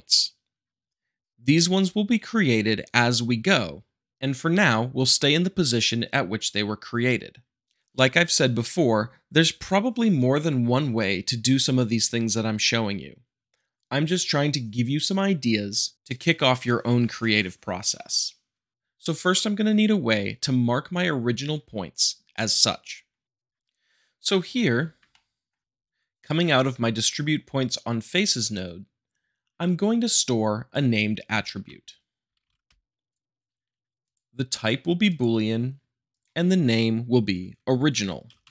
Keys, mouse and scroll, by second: 24.7 middle click, 25.1-26.1 shift+middle drag, 31.5-32.5 typing, 32.7 Return, 33.1-33.4 drag, 34.0-35.1 drag, 38.2-38.5 typing.